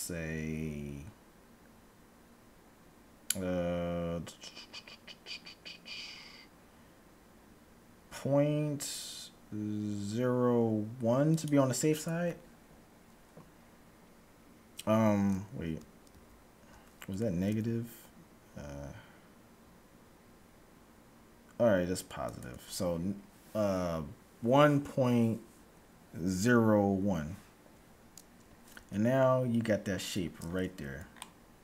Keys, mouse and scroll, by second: 12.5-14.5 middle drag, 16.1 ctrl+z, 17.5 s, 28.6 Tab, 29.6 middle click, 30.0-31.1 scroll up 1, 30.5 middle click.